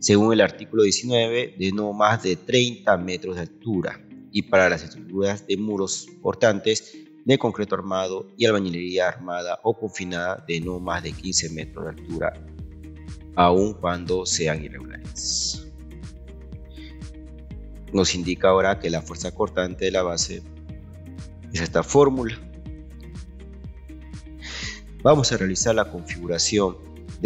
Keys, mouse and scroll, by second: 18.0 scroll down 1, 22.9 scroll down 1, 26.0 2.